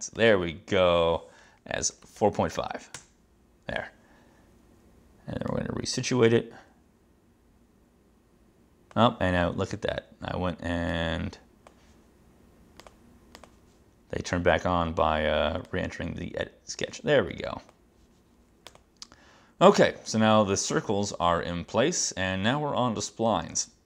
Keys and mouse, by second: 1.7-2.8 typing, 3.0 Return, 5.6 click, 11.0 click, 13.4 click, 15.7 click, 18.8 click.